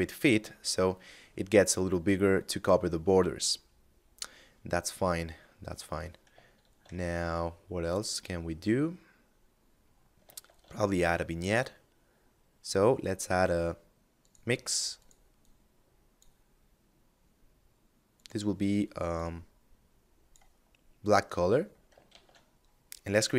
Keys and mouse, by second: 2.2 middle click, 5.7 shift+a, 9.5 shift+a, 13.4 click, 17.3 click, 20.5 middle click, 21.2 shift+a.